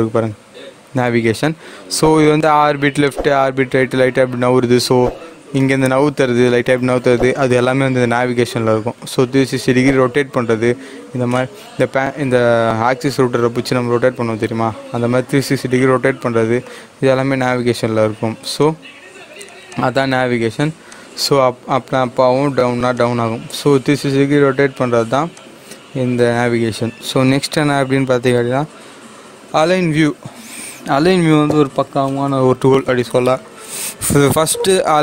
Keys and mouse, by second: 2.9 click, 5.5-9.9 drag, 11.3-18.5 drag, 25.3 click, 27.5 click.